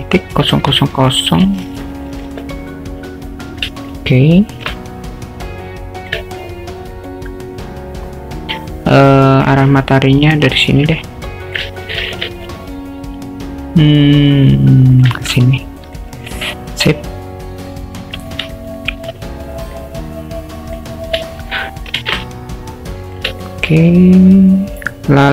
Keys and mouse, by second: 0.5 0, 1.0 0, 4.0-4.6 alt+shift+middle drag, 4.9-6.1 alt+middle drag, 6.9-9.5 drag, 9.8 alt+middle click, 11.2 alt+middle click, 12.1 shift+t, 15.4-16.0 alt+middle drag, 16.3-17.5 alt+middle drag, 17.7 alt+middle drag, 18.5-19.0 alt+shift+middle drag, 20.0 click, 22.0 shift+t, 23.5 alt+shift+middle drag, 23.9-25.3 alt+middle drag.